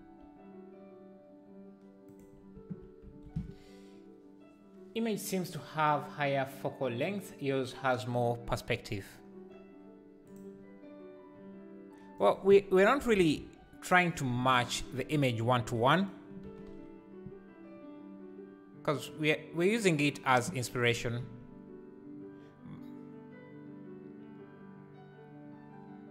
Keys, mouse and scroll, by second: 10.5 click, 13.3-16.4 drag, 16.4 g, 20.0 scroll down 3, 20.9 g.